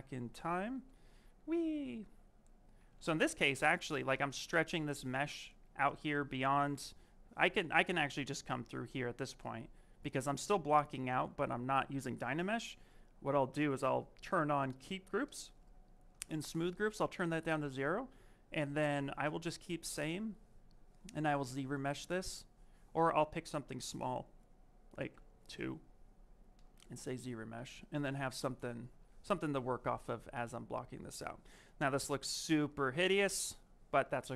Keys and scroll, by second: 0.6 ctrl+z, 0.9 ctrl+z, 1.1 ctrl+z, 1.2 ctrl+z, 1.4 ctrl+z, 2.9 ctrl+shift+z, 3.0 ctrl+shift+z, 5.0 s, 22.2 s, 30.5 s.